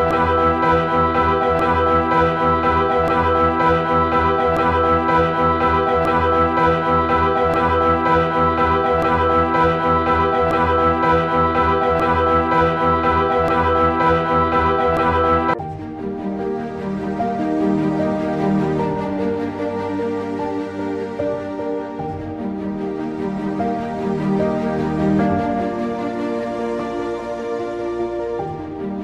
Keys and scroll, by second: 0.0-13.9 typing, 15.0-17.1 typing, 16.8 ctrl+z, 18.5-23.1 typing, 24.5-25.6 typing, 24.7 ctrl+z, 26.9 ctrl+z, 26.9 e, 28.7-29.0 typing.